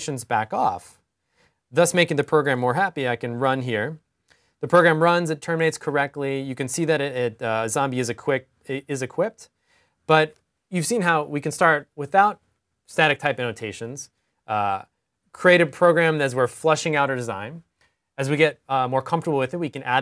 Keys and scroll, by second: 2.0 super+r.